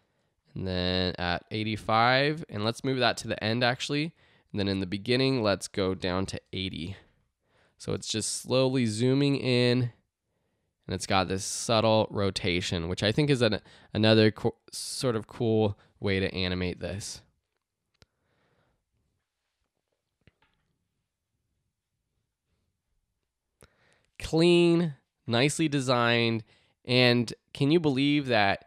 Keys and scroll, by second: 6.0-7.8 typing.